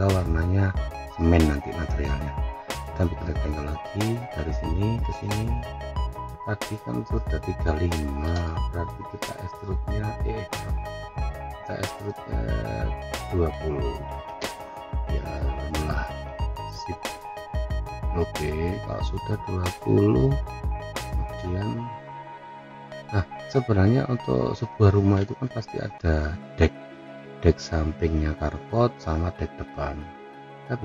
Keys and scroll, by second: 14.3 Return.